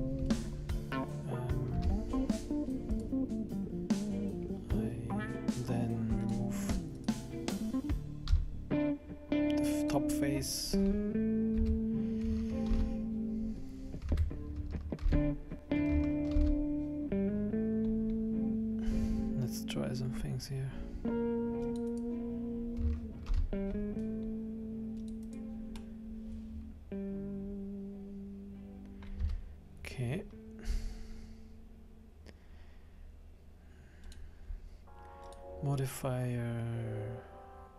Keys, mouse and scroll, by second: 1.1 middle click, 1.8 Tab, 2.9 right click, 6.2 click, 7.0 right click, 8.2 x, 10.4 scroll down 3, 10.6 scroll up 2, 11.5 Tab, 12.7 ctrl+r, 14.1 Tab, 15.1 ctrl+r, 16.3 ctrl+r, 23.3 ctrl+r, 25.8 middle click, 29.2 Tab, 34.1 click, 35.2 click.